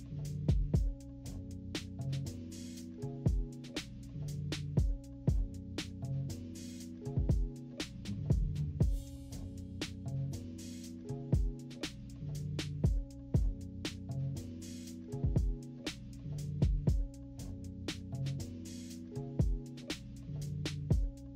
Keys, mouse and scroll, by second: 2.2 =, 2.3-2.6 scroll up 2, 3.0 click, 3.3 scroll up 2, 3.7 scroll down 2, 4.1-9.5 drag, 9.6 -, 10.0 =, 10.4 scroll down 1, 10.6-12.5 drag, 12.7 click, 13.2 -, 13.4 scroll up 2, 13.4 =, 13.8 click, 14.8 -, 14.8 scroll up 4, 15.0 =, 15.1 scroll down 2, 15.2 scroll up 2, 15.4 click, 15.8-16.9 drag, 17.2 -, 17.8 =, 18.2 scroll down 1, 18.3 =, 18.7-21.3 drag.